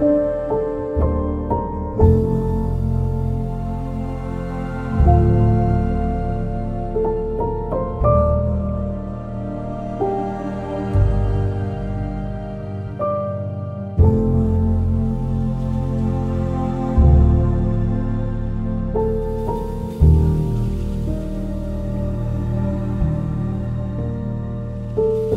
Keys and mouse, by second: 1.3 click, 1.7 shift+click, 2.5 j, 2.9 2, 3.1 click, 4.0 ctrl+b, 6.6 click, 8.2 ctrl+b, 10.0 click, 10.7 ctrl+b, 11.9 click, 12.6 ctrl+b, 14.1 click, 16.6 click, 17.2 ctrl+KP_Add, 17.7-18.9 ctrl+KP_Add, 19.7-20.8 right drag, 21.8 2, 22.2 alt+click, 25.0 1.